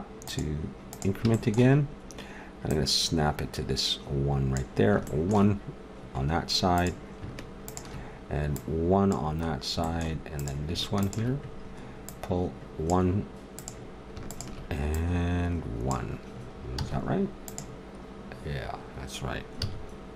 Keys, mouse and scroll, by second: 1.3-4.1 drag, 4.8-6.2 middle drag, 6.8-9.8 drag, 9.8 middle click, 10.1 click, 10.2-11.5 middle drag, 11.5-16.8 drag, 16.8 z, 19.6 z.